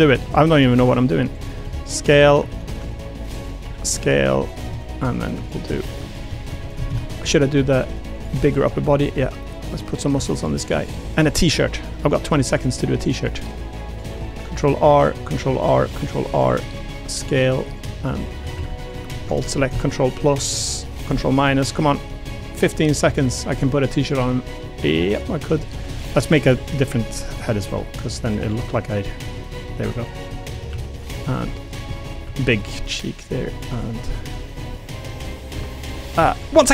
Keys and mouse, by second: 0.1 a, 0.2 a, 0.7 ctrl+r, 1.6 s, 2.2 a, 2.4 a, 2.6 ctrl+r, 3.6 s, 4.5 click, 4.7 click, 4.9 middle click, 5.0 3, 5.9 click, 7.5-10.7 typing, 8.1 click, 8.9 click, 9.7 click, 11.1 click, 11.4 click, 11.9 click, 12.4 ctrl+r, 14.2 ctrl+r, 15.6 ctrl+r, 16.7 s, 17.9 click, 18.1 3, 18.4 a, 18.5 a, 22.5 shift+click, 23.0 a, 23.2 a, 23.5 b, 24.1 g, 25.5 click, 25.8-28.9 typing, 26.2 click, 26.7 click, 27.5 click, 27.8 click, 28.4 click, 28.6 middle click, 29.5 click, 29.7 middle click, 30.1 click, 30.3 middle click, 30.7-34.3 typing, 30.9 click, 31.3 middle click, 31.7 click, 31.9 middle click, 33.1 click, 34.7 click, 35.5-36.7 typing, 36.3 click, 36.5 middle click.